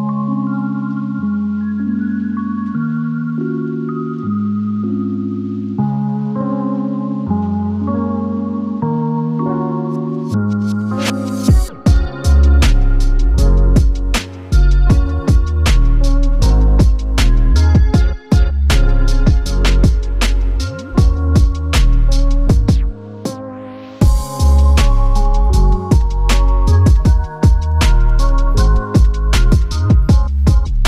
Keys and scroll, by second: 24.1 Tab, 24.9 space.